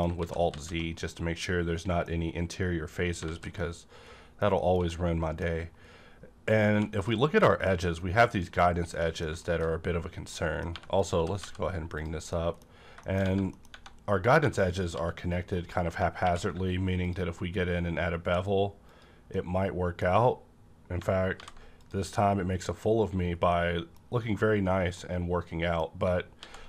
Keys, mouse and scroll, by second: 0.2 z, 0.4 z, 0.9-3.5 middle drag, 3.2 alt+z, 3.5-4.9 middle drag, 4.9-5.9 middle drag, 5.8 scroll up 1, 6.6 2, 6.9 click, 7.0 2, 7.3 middle click, 8.6 scroll down 1, 8.9 middle click, 9.3 shift+middle click, 9.7-10.2 scroll up 1, 10.2 middle click, 10.7 3, 10.9 click, 11.1 g, 11.4 z, 11.9 click, 12.2 middle click, 12.9 middle click, 13.2 Right, 13.2 scroll up 1, 13.4 middle click, 13.7 Tab, 14.3 1, 14.6 click, 14.9 g, 15.4 right click, 15.8 Tab, 16.1 q, 17.0 click, 18.9 click, 19.2 middle click, 19.3-20.9 middle drag, 20.1-20.9 scroll up 1, 20.9-21.3 scroll up 1, 21.3 alt+v, 21.7 click, 23.1-23.8 scroll down 3, 23.4-26.6 middle drag, 26.3 alt+x.